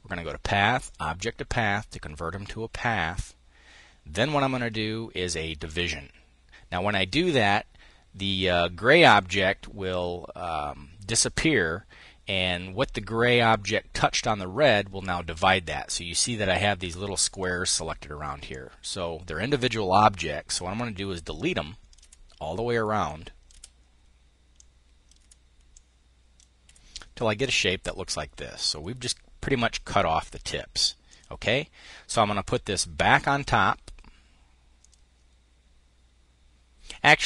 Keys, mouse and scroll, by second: 0.4 click, 3.8 click, 5.3 click, 16.9-18.7 drag, 20.1 Delete, 20.9 click, 21.6 Delete, 22.6 click, 24.2-26.2 drag, 24.8 Delete, 26.2 Delete, 28.1-29.8 drag, 29.9 click, 30.6 middle click.